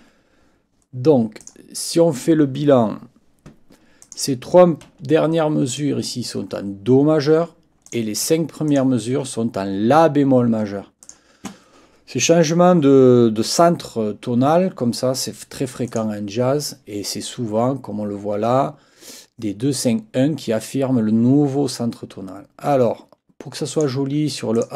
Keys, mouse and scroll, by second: 0.0 Escape, 1.4 click, 4.0 click, 5.7 shift+click, 7.9 click, 8.7 shift+click, 11.0 click, 15.9 click, 23.7 click, 24.6 ctrl+click.